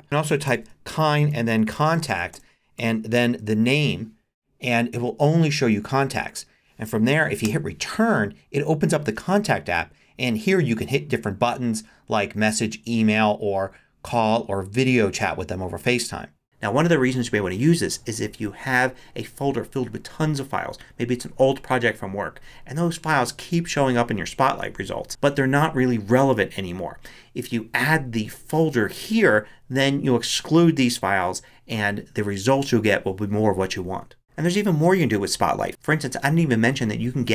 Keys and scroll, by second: 0.0-4.0 typing, 7.4 Return.